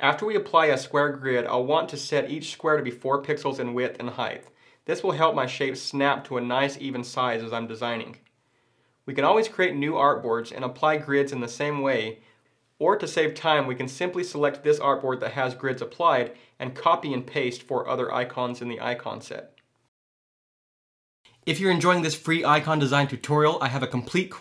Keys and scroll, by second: 16.8 super+c, 17.4 super+v.